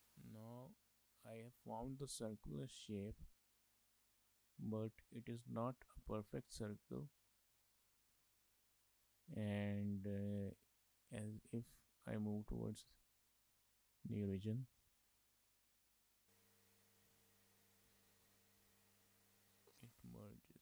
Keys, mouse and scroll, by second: 0.2 middle click, 2.7 shift+middle click, 2.9 middle click, 4.6 click, 7.7 shift+middle click, 7.9 middle click, 8.3 shift+middle click, 8.9 middle click, 10.1 middle click, 11.4 Tab, 13.1-13.7 scroll up 2, 13.7 shift+middle click, 14.8 click, 17.2 shift+middle click, 17.3 middle click, 17.8 Tab, 18.2 Tab, 18.5 Tab, 19.0 scroll up 2, 19.1 shift+middle click, 19.2 middle click, 20.2 scroll down 3, 20.4 shift+middle click.